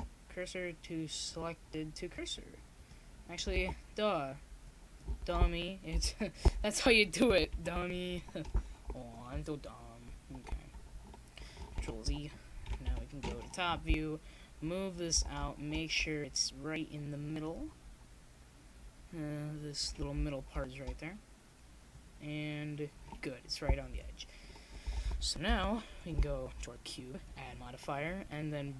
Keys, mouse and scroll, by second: 0.2 ctrl+z, 1.8 ctrl+z, 2.4 click, 2.5 middle click, 7.1 click, 7.8 ctrl+z, 9.3 KP_7, 14.0-16.0 drag, 15.0 ctrl+z, 16.0 middle click, 16.5-18.3 drag, 19.0-21.5 drag, 21.6 shift+s, 22.6 shift+s, 25.8 click, 26.7 ctrl+z, 27.6 click, 28.4 ctrl+z.